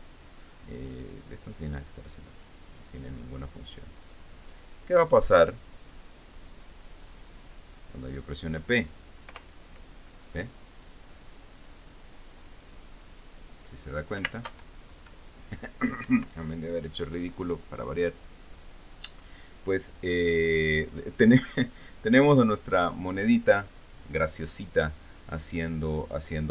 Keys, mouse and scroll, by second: 2.5 click, 7.0 click, 9.9 p, 14.9 space, 16.7 Escape.